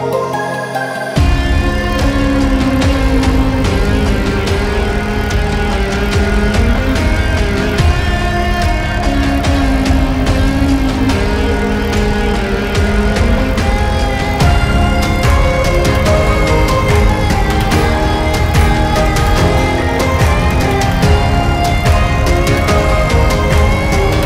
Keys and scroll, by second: 0.7 ctrl+z, 5.1 ctrl+z, 7.2 Up, 9.2 Delete, 20.6 Delete.